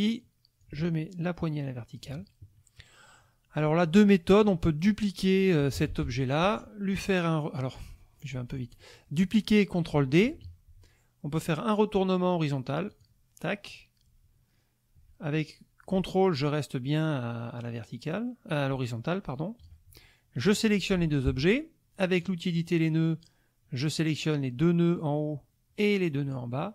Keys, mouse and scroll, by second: 0.6-2.1 ctrl+drag, 5.7 ctrl+d, 6.0 ctrl+F1, 8.3 ctrl+z, 8.7 ctrl+click, 10.2 ctrl+d, 12.9 click, 13.7-19.8 drag, 20.4 shift+click, 22.2 click, 24.0-26.5 drag.